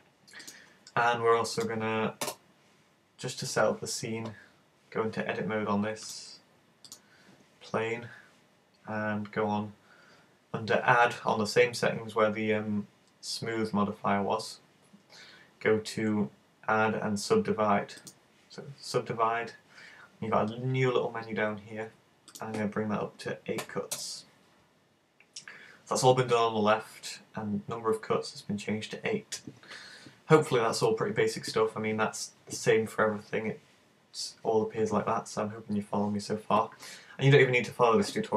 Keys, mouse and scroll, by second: 0.4 right click, 2.3 super+z, 6.1 click, 6.9 click, 18.0 click, 22.3 click.